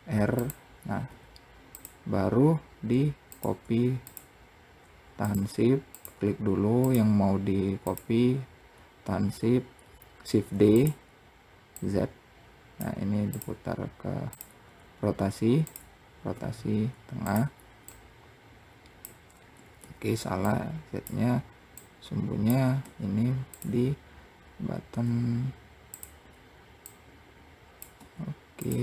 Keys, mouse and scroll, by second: 2.7 click, 3.4 shift+click, 4.7 click, 6.2 click, 7.2 shift+click, 9.8 shift+d, 11.2 click, 12.8 click, 13.7 click, 15.1 click, 15.8 r, 17.3 click, 19.0 ctrl+z, 19.9 click, 21.2 click, 24.5 r, 26.3 click.